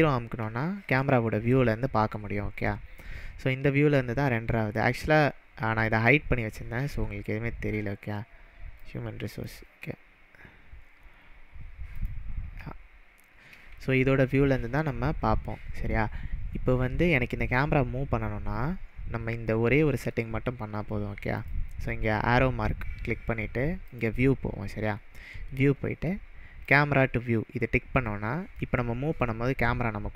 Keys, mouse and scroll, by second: 4.8-6.3 drag, 7.5-8.7 scroll down 6, 8.8-9.7 drag, 10.9-11.9 scroll up 6, 12.1 click, 21.4-24.0 drag, 26.6 click, 26.8 click, 28.6-30.1 middle drag.